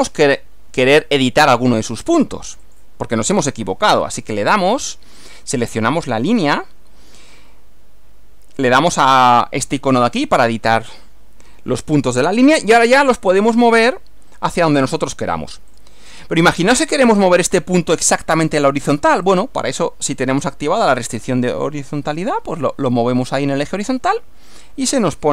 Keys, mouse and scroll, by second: 2.7 click, 10.0 click, 13.5 click, 15.8 click, 19.3 click, 24.2 click.